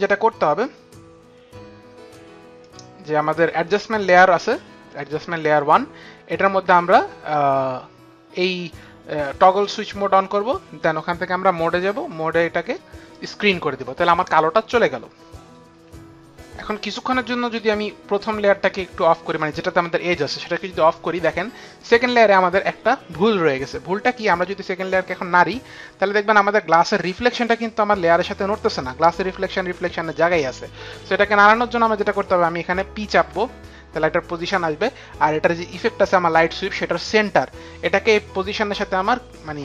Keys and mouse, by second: 2.5 click, 9.5 click, 11.4 click, 15.8 F9, 18.6 click, 25.2 click, 30.8 ctrl+z, 33.2 ctrl+z, 33.2 p.